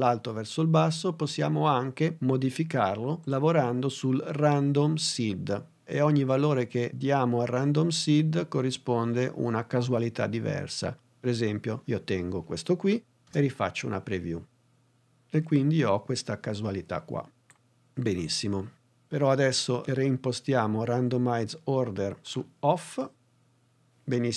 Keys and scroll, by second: 13.1 space.